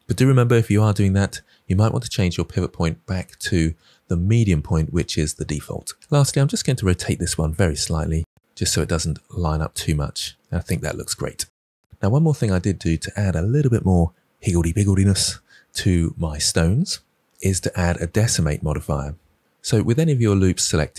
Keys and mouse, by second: 2.2-6.0 drag, 6.6 r, 6.7 z.